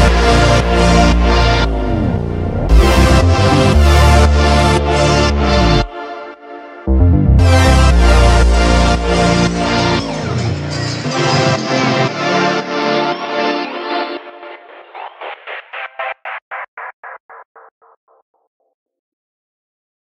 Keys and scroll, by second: 0.0 Escape, 2.2 F3, 2.3 Escape, 3.5 shift+Page_Down, 4.5 shift+F2, 4.6 Escape, 7.3 g, 13.0 shift+Page_Down, 13.1 ctrl+Page_Up, 18.6 shift+F2.